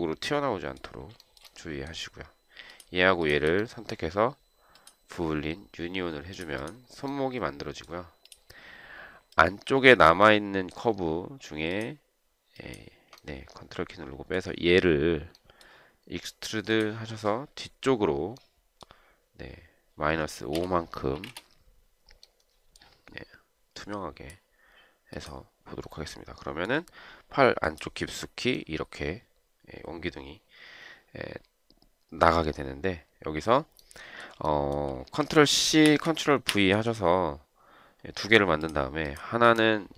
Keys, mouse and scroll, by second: 1.5 shift+right click, 3.5 shift+click, 3.6 shift+double click, 12.0 ctrl+click, 12.9 ctrl+click, 20.9 -, 21.4 5, 21.5 Return, 34.8 shift+right click, 36.1 ctrl+c, 36.8 ctrl+v.